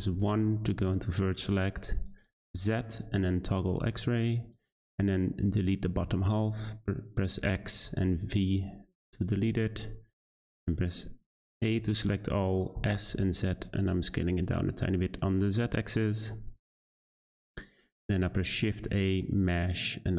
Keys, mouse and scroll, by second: 1.1-2.4 drag, 2.4 z, 4.5 click, 6.1 x, 10.2 a, 12.7 s, 16.5 Tab, 18.1 shift+a.